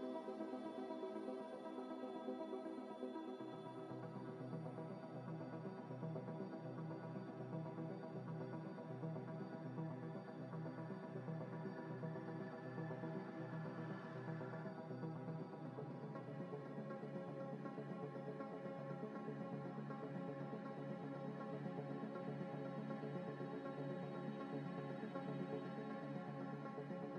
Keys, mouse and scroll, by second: 0.9 s, 1.1 x, 2.0 y, 2.4 x, 7.9 Tab, 8.6 middle click, 9.7 z, 9.9 scroll down 1, 10.3 z, 10.5 z, 13.2 scroll up 1, 14.2 Tab, 15.7 ctrl+z, 16.8 ctrl+z, 18.0 Tab, 18.5 Tab, 18.6 a, 19.1 u, 20.0 scroll down 1, 20.7 a, 20.9 g, 21.9 scroll up 1, 22.4-24.1 typing, 25.1-27.1 typing.